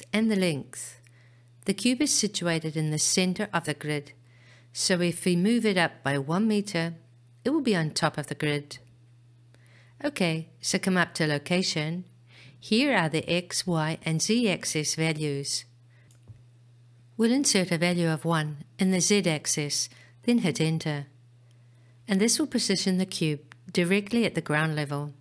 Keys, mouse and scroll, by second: 16.1-19.8 right drag.